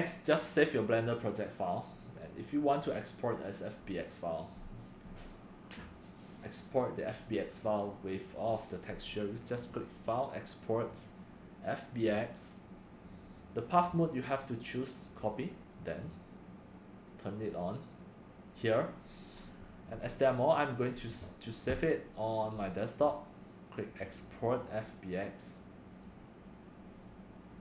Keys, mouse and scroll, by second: 3.7 drag, 4.6 middle click, 9.7 click, 16.1 click, 24.6 click, 25.1 click, 26.2 click.